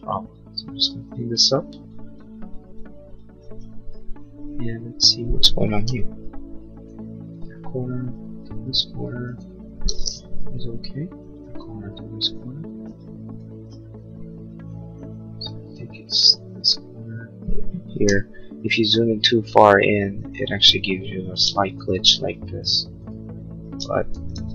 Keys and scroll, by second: 5.7 l, 10.3 l, 18.0 l, 24.2 ctrl+z.